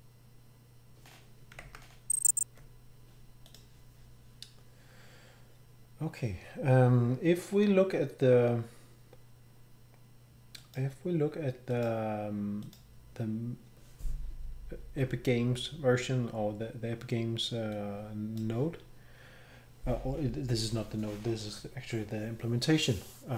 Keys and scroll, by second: 1.6 alt+Tab.